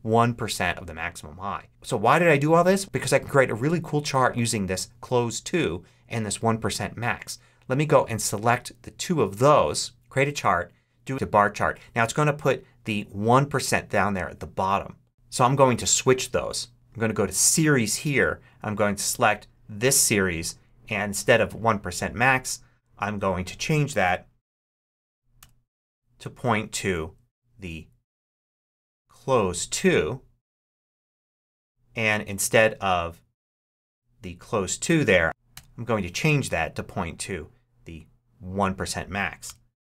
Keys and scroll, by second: 25.3 BackSpace, 35.2 BackSpace, 39.3 Return.